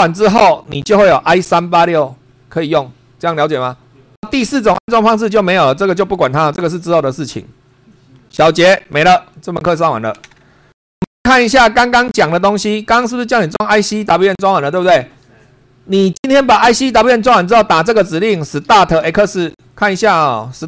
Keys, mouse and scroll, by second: 12.3 super+2, 13.5 Up, 17.5 Down, 18.0-19.5 typing.